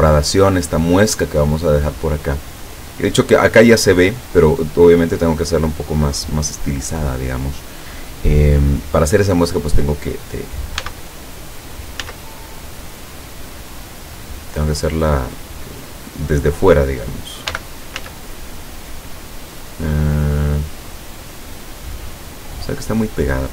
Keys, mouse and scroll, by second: 1.3-2.6 drag, 10.8 s, 12.0 z, 15.9 click, 17.5 g, 18.0 z, 22.6 click.